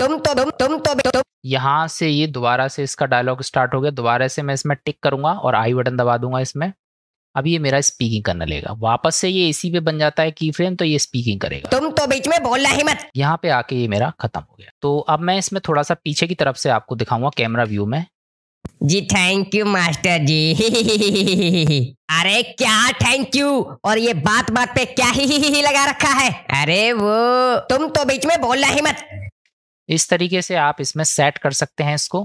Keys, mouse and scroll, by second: 0.3 click, 1.2 space, 1.4 click, 5.2 click, 8.0 middle click, 11.6 space, 13.0 space, 13.3 click, 15.7 click, 17.7 KP_0, 18.3 ctrl+space.